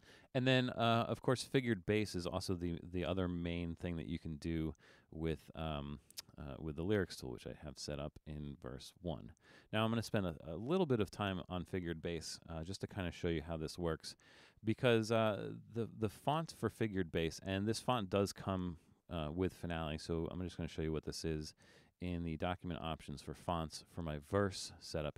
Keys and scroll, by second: 13.5 super+=.